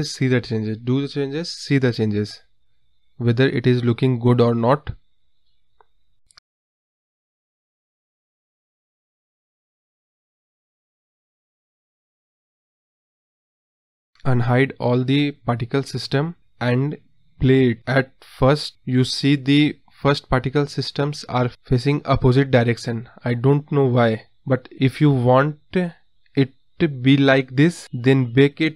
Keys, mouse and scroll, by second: 0.2 space, 3.3 space, 3.9-5.3 drag, 6.6 click, 7.3 space, 9.9 scroll down 2, 10.1-10.8 scroll up 11, 12.2-12.6 scroll up 6, 12.6 space, 14.3-16.3 drag, 16.3 space, 18.8 space, 22.2-25.5 scroll down 4, 26.5 space.